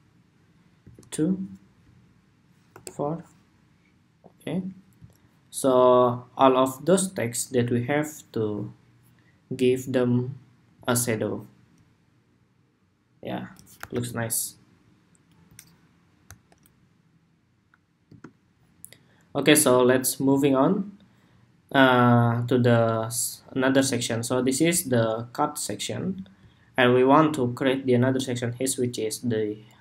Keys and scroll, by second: 13.5 super+-.